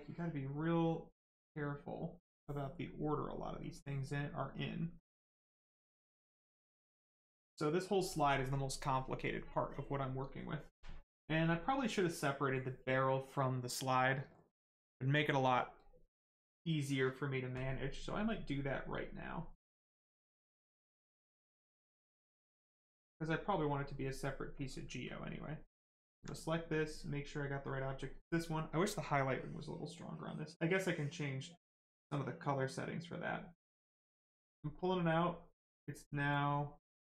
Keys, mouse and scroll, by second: 4.6 alt+click, 5.7 click, 19.7 click, 25.0 alt+click, 33.9 click, 36.3 click.